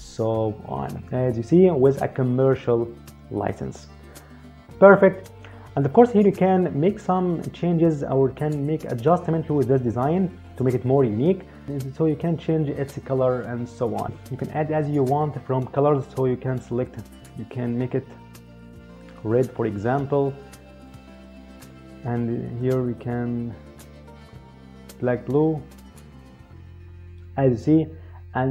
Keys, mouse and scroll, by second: 1.6 click, 16.6 click, 18.8 click, 22.4 click.